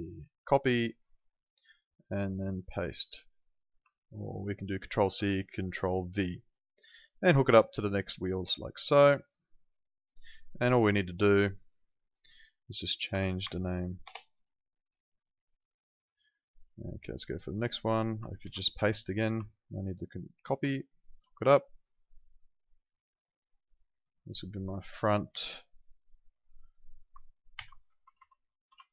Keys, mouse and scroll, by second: 1.6 right click, 2.8 click, 4.0 ctrl+click, 7.1 click, 13.1 BackSpace, 13.6 shift+l, 14.1 Return, 15.3 click, 18.4 ctrl+v, 19.5 ctrl+click, 27.6 shift+f, 28.1 Right, 28.7 BackSpace.